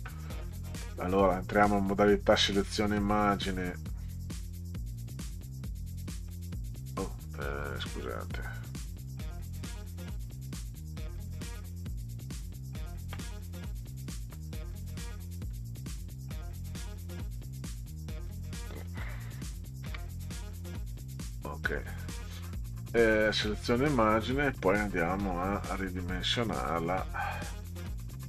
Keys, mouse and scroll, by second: 1.7 click, 3.0 click, 4.1 click, 4.7 click, 8.4 click, 9.1 click, 10.0 click, 11.1 click, 14.0 click, 15.4 click, 16.0 click, 16.9 click, 19.9 ctrl+x, 21.0 click, 22.3 click, 23.3-25.9 drag.